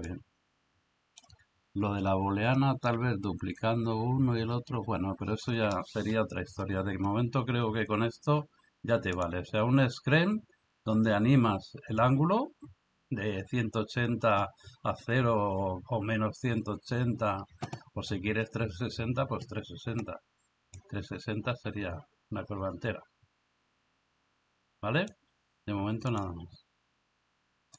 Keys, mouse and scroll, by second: 0.1-1.3 drag, 9.1 drag, 20.9-25.1 drag.